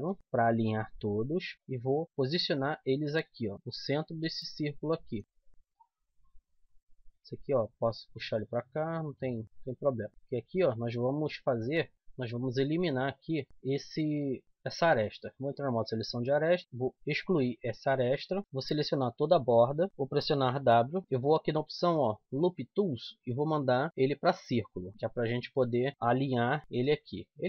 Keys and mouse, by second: 0.6 middle click, 1.5-2.9 drag, 4.4-6.6 right drag, 5.3 click, 5.5 z, 5.7 click, 7.1 click, 7.3 middle click, 8.6 middle click, 10.0-11.3 middle drag, 11.8 click, 12.0-13.5 middle drag, 13.5 click, 13.7 z, 14.3 z, 14.5 z, 15.4-17.3 drag, 16.8 x, 18.5 click, 19.2 right click, 20.4 w, 24.8 middle click, 25.2 click, 25.6 z, 25.9 middle click, 26.2 r.